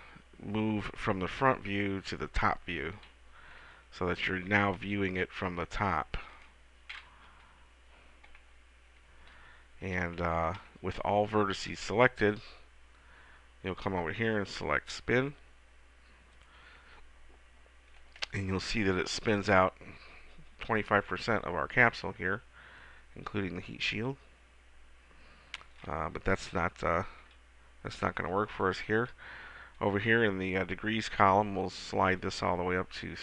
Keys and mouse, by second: 2.2 KP_7, 7.6-8.8 middle drag, 7.6 KP_7, 9.2 middle click, 10.8 a, 11.2 a, 16.5 click, 16.7-18.3 middle drag, 27.4 KP_7, 32.2 click.